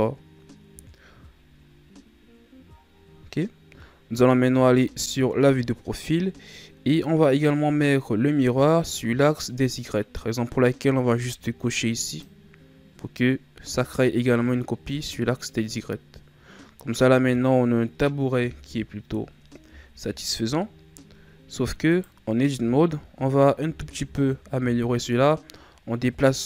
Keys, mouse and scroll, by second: 0.8-1.6 scroll down 2, 1.6-4.5 scroll up 1, 4.5 KP_3, 12.1 click, 13.6 a, 15.1-15.7 scroll down 4, 15.7-18.4 middle drag, 18.4 KP_1, 19.7-21.2 shift+scroll up 4, 21.9 right click, 22.5 Tab, 23.7 z, 24.1-24.8 scroll up 1, 24.8-25.8 scroll up 2, 25.8-26.4 scroll up 1.